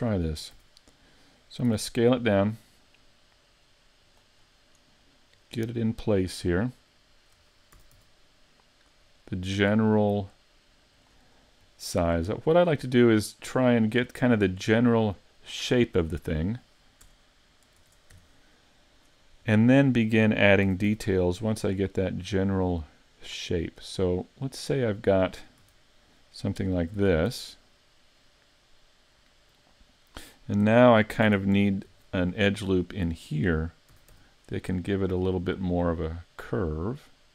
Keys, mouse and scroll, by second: 0.3-0.6 scroll up 3, 0.6 z, 1.7 s, 4.2 click, 4.4-5.1 scroll up 3, 5.4 click, 6.9 shift+middle click, 7.8 s, 9.2 click, 10.0 click, 11.4-11.8 scroll up 2, 11.8 shift+middle click, 13.1 click, 17.1 Tab, 17.8 ctrl+Tab, 19.0 right click, 20.7 s, 25.6 z, 27.0 z, 27.3 Tab, 31.3 Tab, 31.9 ctrl+r, 33.1 click, 33.9 s.